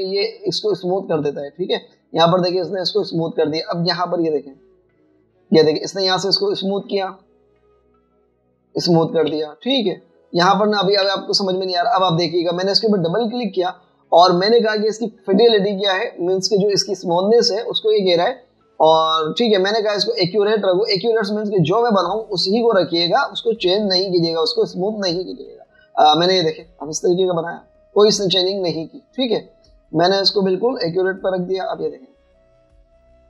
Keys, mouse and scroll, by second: 2.4 alt+scroll up 1, 3.7 alt+scroll down 1, 7.3 space, 10.3 v, 11.1 scroll down 1, 11.3 v, 12.3 alt+scroll down 2, 12.5 space, 14.3 double click, 24.7 alt+scroll up 1, 30.6 double click.